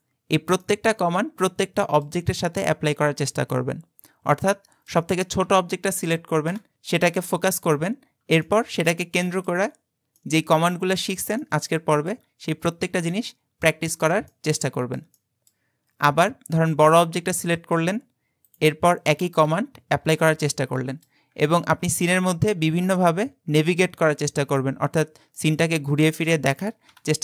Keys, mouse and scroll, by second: 0.6-3.8 middle drag, 4.5-6.5 shift+middle drag, 6.5 KP_Decimal, 7.9-8.5 scroll down 2, 8.5-12.4 middle drag, 12.4-13.1 scroll down 4, 13.1-15.8 ctrl+middle drag, 15.8-17.2 scroll down 22, 17.6 shift+middle click, 18.0-18.5 scroll down 5, 18.5 click, 19.5 KP_Decimal, 20.2-21.3 middle drag, 21.3-21.6 scroll down 5, 21.6-24.3 shift+middle drag, 24.3 click, 24.9-25.4 scroll up 2, 25.4-26.9 middle drag, 26.9 KP_Decimal.